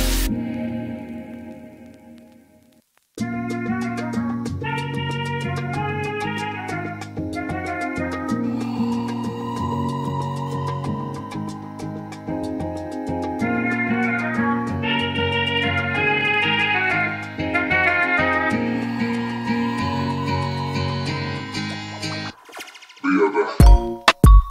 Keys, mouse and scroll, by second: 0.5 click, 1.0 BackSpace, 1.7 Return, 6.0 click, 11.5 click, 11.7 double click, 14.4 click, 16.4 Right, 16.7-18.5 typing, 19.4 Return, 20.9 Return, 21.1 click, 23.2 click.